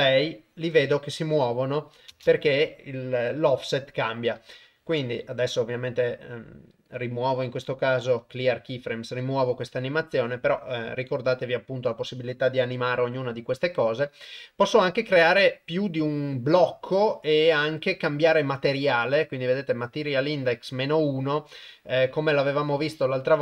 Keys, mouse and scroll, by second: 2.2 shift+space, 4.8 shift+Left, 5.6 middle click, 6.3-8.3 right drag.